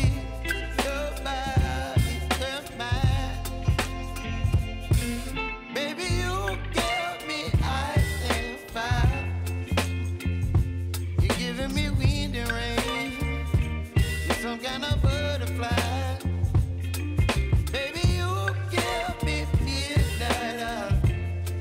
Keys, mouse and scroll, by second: 0.4 click, 1.3 Return, 2.1 click, 3.3 s, 4.2-6.5 drag, 6.5 p, 7.0-9.3 drag, 10.8 space, 14.0 click, 16.2 click, 17.3 s, 17.7 click, 18.6 space.